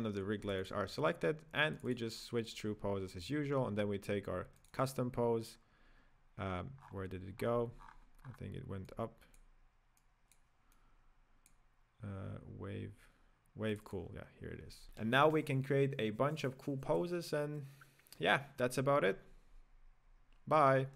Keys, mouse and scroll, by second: 0.5 click, 0.9 click, 1.8 click, 2.2 click, 4.6 click, 5.0 click, 5.7-6.8 scroll down 1, 6.8-8.9 scroll up 27, 8.9-10.1 drag, 10.8-12.5 drag, 12.5-13.7 scroll down 4, 13.7 click, 14.1 click, 14.8-16.5 middle drag.